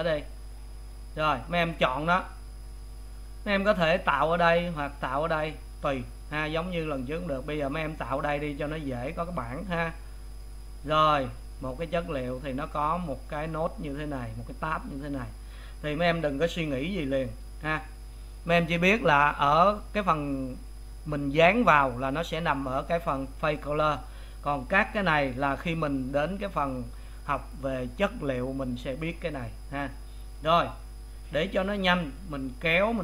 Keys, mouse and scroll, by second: 10.4-26.8 drag.